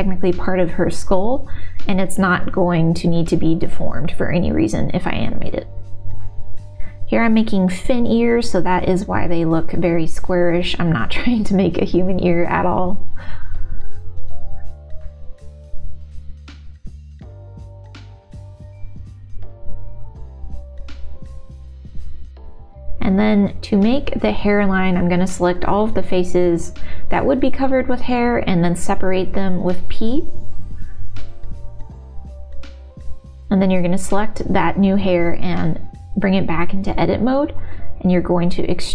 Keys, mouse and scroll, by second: 1.5 s, 1.9 middle click, 2.8 e, 4.4 middle click, 4.7 click, 5.5 o, 5.7 g, 7.8 middle click, 8.6 g, 9.5-10.7 middle drag, 11.1 middle click, 11.2 click, 11.9 click, 12.8 r, 13.5 s, 15.2 s, 15.6 middle click, 16.4 3, 16.4 2, 17.1 x, 17.9 click, 18.2 middle click, 18.4 middle click, 19.0 g, 19.7 middle click, 20.5 click, 21.0 middle click, 21.7 click, 22.1 click, 22.4 middle click, 23.0 shift+click, 25.2 middle click, 25.8-27.1 shift+drag, 27.2 middle click, 28.5 shift+click, 29.1 middle click, 30.1 shift+d, 31.0 p, 32.8 Tab, 33.2 click, 34.3 Tab, 34.9 shift+middle click, 35.2 middle click, 36.3 middle click, 37.8 middle click.